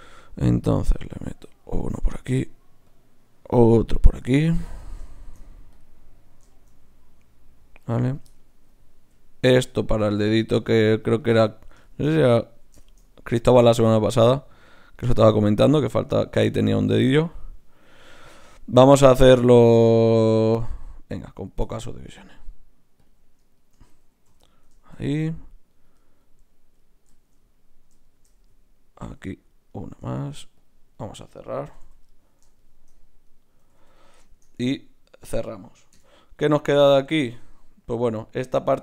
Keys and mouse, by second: 1.0 d, 1.1-4.2 drag, 5.2 shift+q, 8.0-10.0 drag, 9.1 g, 10.2 g, 14.0-15.7 drag, 14.0-15.6 right drag, 16.9 g, 19.4 g, 20.7-23.6 drag, 24.3 f, 24.4 click, 24.4 right click, 27.1 click, 29.0 ctrl+r, 30.2 ctrl+Tab, 30.9-32.5 drag, 31.7 f, 31.8 f, 33.6 f, 33.8 f, 35.9 KP_Divide.